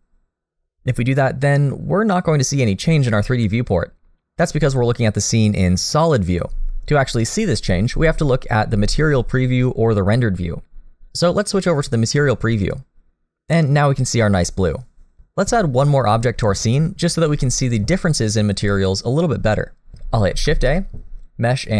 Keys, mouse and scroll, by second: 12.6 click, 20.3 shift+a.